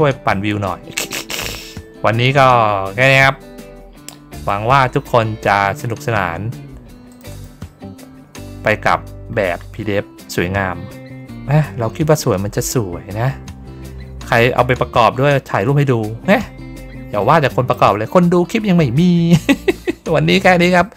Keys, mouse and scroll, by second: 1.2 middle click, 4.4 click, 7.1 click, 7.3 click, 8.6 middle click, 10.2-17.7 drag.